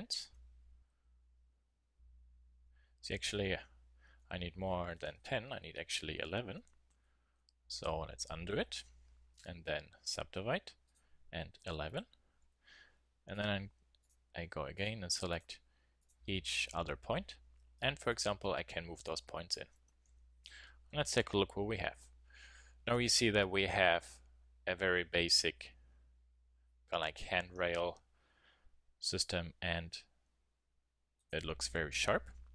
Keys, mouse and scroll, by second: 1.8 click, 3.7-7.3 typing, 10.0 click, 10.6 click, 12.4 a, 12.6 click, 13.3 click, 15.6 a, 17.7 click, 18.1-19.8 drag, 19.8 Tab, 20.0 z, 31.1-32.5 drag.